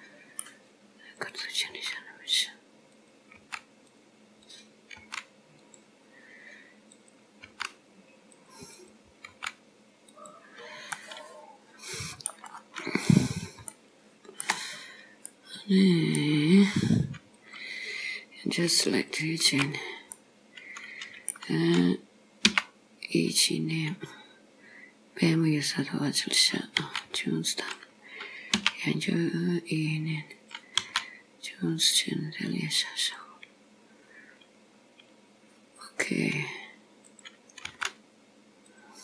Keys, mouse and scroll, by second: 1.3 click, 1.8 g, 3.0 click, 3.4 g, 4.4 click, 5.0 g, 7.0 click, 7.6 g, 8.9 click, 9.3 g, 10.6-11.0 scroll down 4, 11.0 middle click, 12.6-13.5 scroll up 2, 13.5 scroll up 2, 13.8 shift+middle click, 14.8-15.4 scroll up 2, 15.4 middle click, 17.4 click, 19.0 alt+click, 19.8-20.2 scroll down 3, 20.2 middle click, 22.5 e, 26.8 s, 28.7 e, 30.9 s, 34.8-35.8 scroll up 2, 37.1 click, 37.7 g.